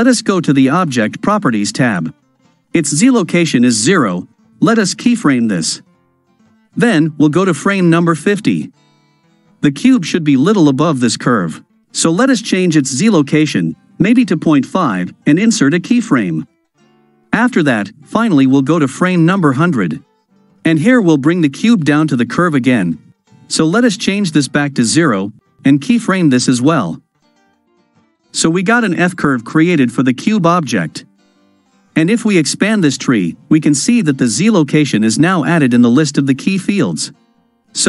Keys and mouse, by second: 8.1 click, 12.8-14.3 drag, 15.7 click, 18.2 click, 19.1 Right, 23.9 click, 26.1 click.